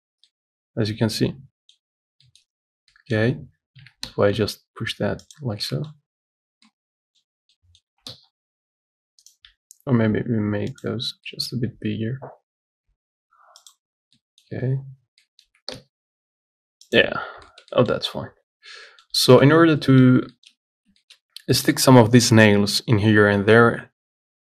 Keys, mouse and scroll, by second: 0.2 scroll down 3, 0.5-2.0 middle drag, 2.0-2.5 scroll down 3, 2.5 middle click, 2.6-3.0 scroll up 6, 3.1 middle click, 3.5-4.1 scroll down 2, 4.1 g, 5.8 scroll down 4, 6.0 middle click, 6.6-6.9 scroll up 1, 6.9 middle click, 7.4-7.9 scroll up 2, 7.9 middle click, 8.1 s, 11.2 scroll down 3, 11.5 middle click, 11.9 scroll down 1, 12.6 scroll up 2, 13.1 s, 14.1 scroll up 2, 14.4 middle click, 15.1 scroll up 5, 15.5 middle click, 15.7 g, 17.4 scroll up 2, 17.7 shift+middle click, 18.4-19.1 scroll down 15, 19.1 middle click, 19.8 scroll down 1, 20.0 middle click, 20.3-21.2 scroll up 2, 20.6 shift+middle click, 21.2 shift+middle click, 21.6 scroll down 1, 21.8 middle click, 22.1-23.0 scroll up 2, 23.0-23.6 scroll down 5, 23.6-24.4 shift+middle drag.